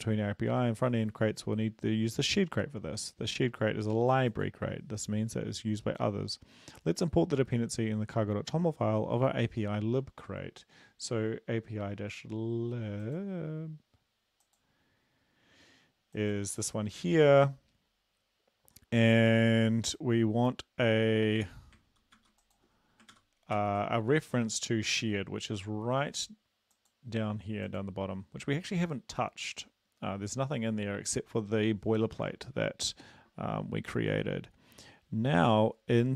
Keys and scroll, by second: 22.2 ctrl+c, 23.2 ctrl+v, 23.6 ctrl+s.